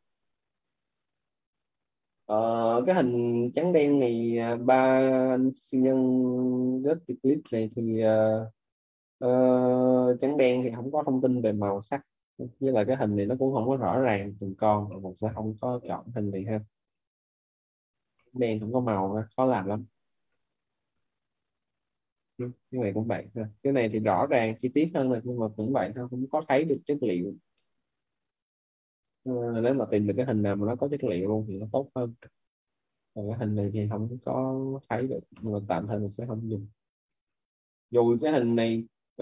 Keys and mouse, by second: 0.7 click, 3.1 click, 4.9 middle click, 5.8 click, 7.2 middle click, 16.8 click, 18.0 Delete, 20.1 click, 24.0 middle click, 28.9 click, 32.1 Delete, 33.6 click.